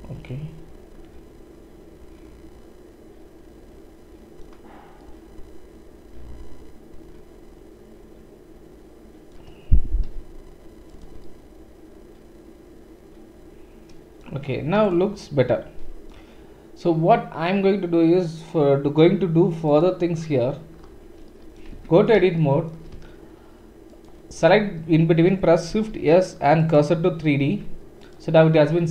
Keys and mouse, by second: 2.0 click, 6.4 click, 10.0-10.9 typing, 14.8 click, 19.7 click, 19.8-20.7 middle drag, 21.7 Tab, 24.5-28.9 middle drag, 25.7 shift+s, 27.4 Tab, 28.0 click.